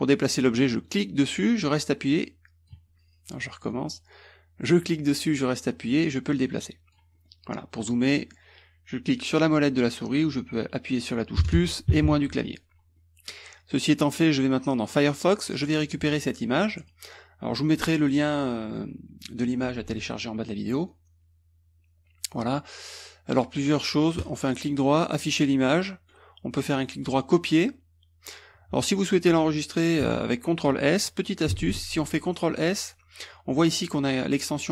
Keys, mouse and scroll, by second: 0.9-2.9 drag, 3.6 click, 5.0-7.1 drag, 7.1 middle click, 7.8 middle click, 8.2 middle click, 9.4 middle click, 11.5 KP_Add, 12.0 KP_Subtract, 13.0 click, 14.8 click, 16.8 click, 20.8 click, 24.2 right click, 25.2 click, 26.1 right click, 27.2-31.5 drag, 31.8 ctrl+s.